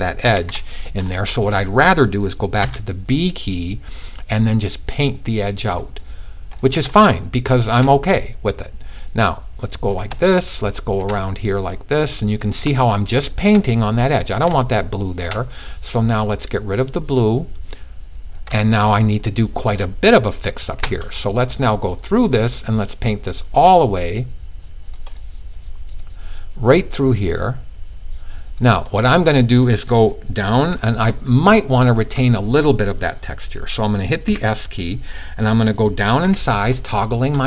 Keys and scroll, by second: 2.1 b, 31.5 ;, 33.8 typing, 35.8-36.1 typing.